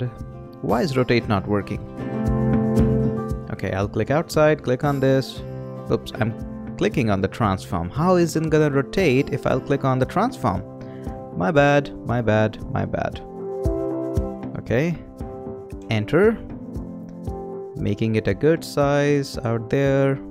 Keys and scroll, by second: 15.7 Return.